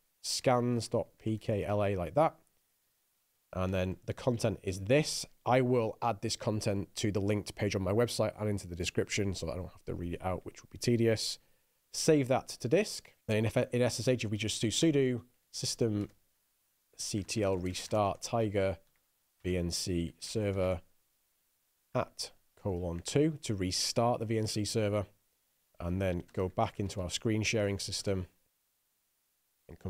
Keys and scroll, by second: 0.0-2.6 typing, 3.3 Return, 4.1 i, 4.7 super+v, 11.6 Escape, 12.3-23.4 typing, 13.7 ctrl+l, 24.8 Return, 26.7-27.8 typing, 28.4 Return.